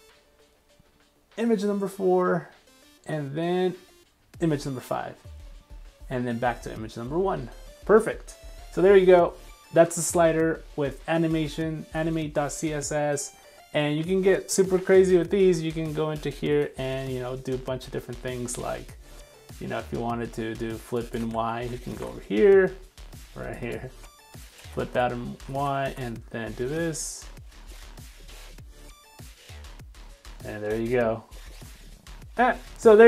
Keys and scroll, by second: 15.4 super+3, 21.2 super+c, 21.6 super+1, 22.1 super+Tab, 23.0 super+s, 24.6 super+v, 24.9 super+s, 25.9 super+r.